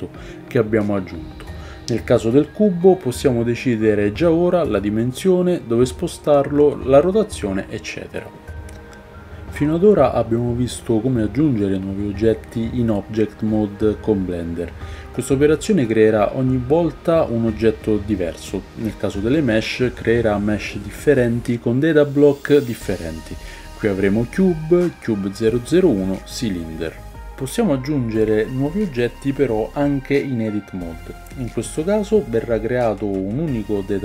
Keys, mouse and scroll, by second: 8.5-19.8 shift+drag, 9.0 shift+a, 11.7 shift+middle click, 12.0 shift+right click, 12.5 shift+a, 15.3 shift+a, 18.5 g, 19.8-21.0 middle drag, 21.0 click, 21.5-22.2 middle drag, 22.2 click, 22.3-23.0 middle drag, 23.0-24.4 drag, 24.4-27.2 middle drag, 26.7 Tab, 27.2 shift+right click, 27.3-29.6 shift+middle drag, 27.6 shift+a, 29.6 click, 29.8-34.0 middle drag, 30.5 shift+a, 33.0 Tab.